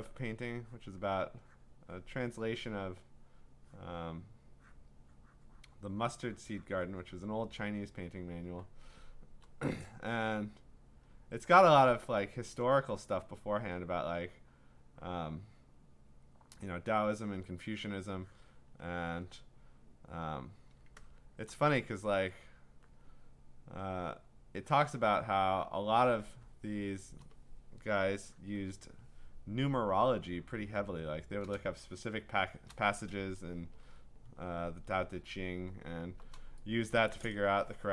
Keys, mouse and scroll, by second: 1.0 click, 1.6 click, 2.0 click, 3.0 click, 3.8 click, 4.8 click, 7.6 click, 8.5 click, 11.0 click, 12.6 click, 13.0 click, 15.3 click, 15.7 click, 16.6 click, 17.2 click, 18.7 click, 18.9 click, 19.1 click, 19.2 click, 20.3 click, 21.4 click, 21.5 click, 22.6 click, 24.8 click, 25.9 click, 26.7 click, 26.8-27.2 click, 28.4 click, 31.0-32.3 click, 32.1 click, 32.1 click, 32.4 click, 32.6 click, 32.7 click, 33.9-36.3 scroll, 36.6 scroll, 37.1 click.